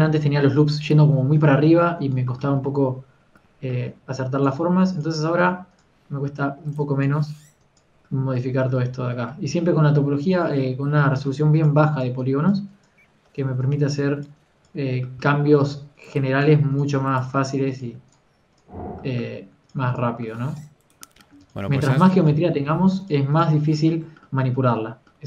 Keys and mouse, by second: 0.0 Tab, 0.6 Tab, 0.9 Tab, 2.7 Tab, 6.3 g, 6.6 f, 7.4 f, 7.8-9.8 drag, 11.2 KP_3, 15.9 ctrl+z, 15.9 f, 16.8 f, 17.4 f.